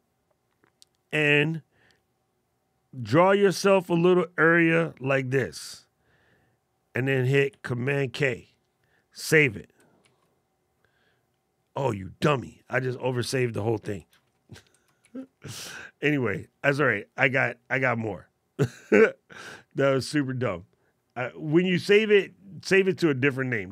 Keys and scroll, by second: 7.3 super+k, 9.8 super+s, 14.8 shift+super+z.